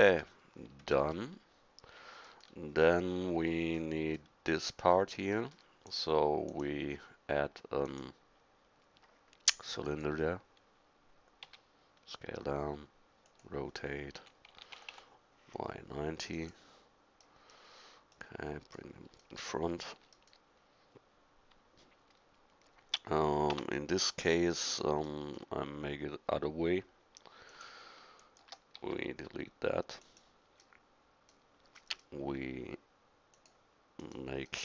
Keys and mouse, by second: 0.9-1.3 middle drag, 5.9-7.4 middle drag, 7.4-7.7 drag, 11.4 s, 14.2 r, 23.5 Tab, 27.5 click, 28.8 x, 33.4-34.6 middle drag.